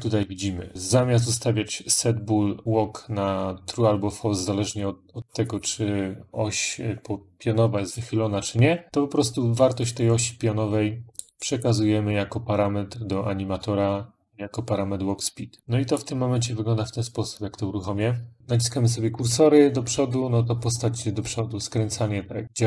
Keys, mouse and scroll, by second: 10.9 click, 11.5 click, 15.0 click, 15.4 click, 17.2 click, 17.2 click, 18.4 Up, 18.6 Up, 21.7-22.6 Up.